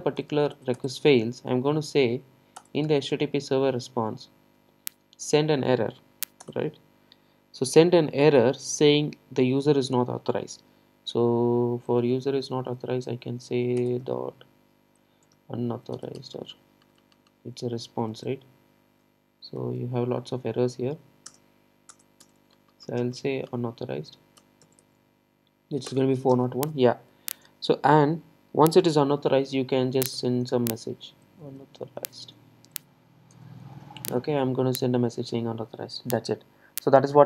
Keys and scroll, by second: 2.6 Return, 13.9 Return, 21.9 Return, 35.8 super+s.